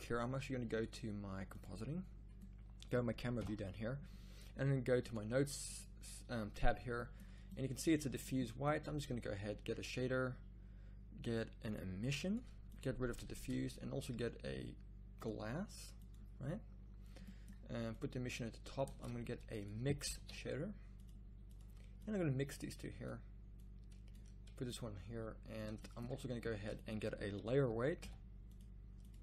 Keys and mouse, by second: 1.6-3.3 middle drag, 3.3 KP_0.